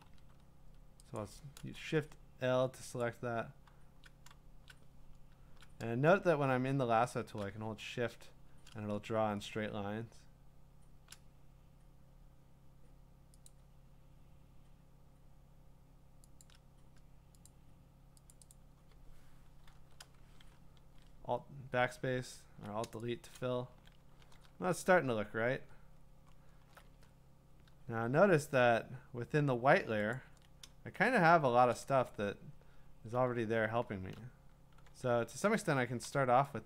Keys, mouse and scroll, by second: 0.0 l, 1.2 click, 3.0 click, 4.7-12.6 drag, 13.5 click, 16.4 shift+click, 17.5 click, 18.3 click, 18.5 shift+click, 18.6 click, 18.6 shift+click, 19.7 alt+BackSpace, 21.8-22.2 alt+scroll, 23.4 click, 23.7 ctrl+d, 24.4-26.0 scroll, 26.2-26.7 scroll, 26.7 scroll down 7, 27.8-28.2 scroll down 2, 28.0-29.0 scroll up 2, 30.1 ctrl+click, 31.2 scroll, 31.7 click, 32.1-33.4 scroll, 33.9 scroll.